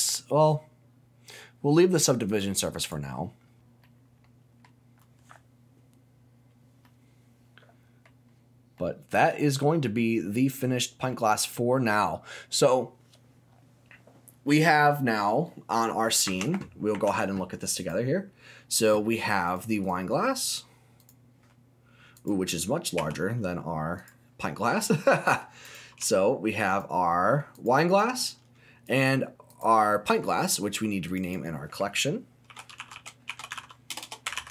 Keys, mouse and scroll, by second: 2.3 click, 2.8 click, 3.4-3.8 scroll down 1, 3.8 middle click, 6.8-8.0 middle drag, 8.7 middle click, 10.0-11.1 scroll up 1, 11.1-12.2 middle drag, 14.8 middle click, 15.4 middle click, 16.2 Tab, 16.9 Tab, 17.4-17.7 scroll up 1, 17.7 click, 18.2-19.4 scroll down 2, 19.4 click, 19.8 click, 21.0 click, 22.1 click, 23.0 g, 24.0 click, 24.4 middle click, 25.6 click, 26.0 g, 26.7 click, 27.1 middle click, 27.5 click, 27.9 click, 28.8 click, 29.5 click, 31.0 click, 31.2-34.5 drag, 34.0 BackSpace.